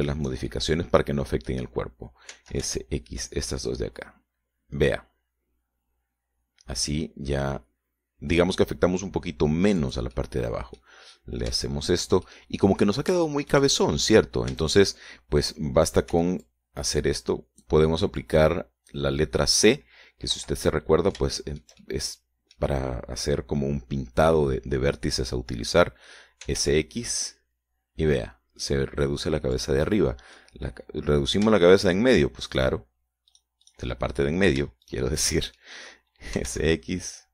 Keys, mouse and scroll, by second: 0.8 shift+right click, 1.4 shift+right click, 1.9-3.0 shift+middle drag, 3.7 s, 4.0 x, 11.2 click, 11.6 middle click, 12.5-14.2 middle drag, 14.6-15.8 shift+middle drag, 15.9 a, 17.5 c, 17.8-19.2 drag, 19.6 click, 21.7 Escape, 22.0 middle click, 22.8-23.2 shift+scroll down 2, 23.2 shift+middle click, 27.6-28.5 typing, 31.0 click, 31.3 middle click, 32.6 shift+right click, 33.2 shift+right click, 33.6 shift+right click, 33.9 shift+right click, 34.7 shift+right click, 35.4 shift+middle click, 36.2 shift+right click, 36.6 shift+right click, 37.0 shift+middle click.